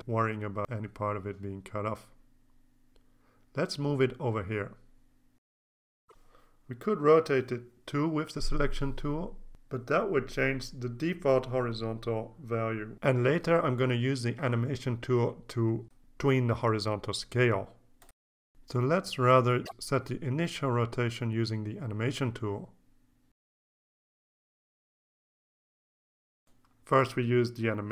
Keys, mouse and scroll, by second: 3.0-22.5 shift+drag, 23.9 click, 25.9 click, 26.9 click.